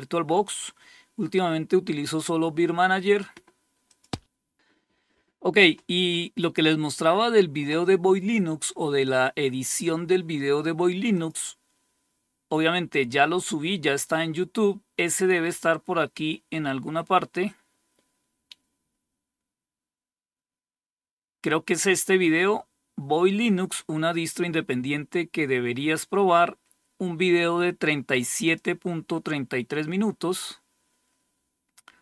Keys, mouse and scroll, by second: 3.3 click, 9.1 click, 10.6 click, 15.8-18.7 scroll down 2, 19.4-20.4 scroll down 1, 27.0-27.9 scroll down 1, 27.9 click.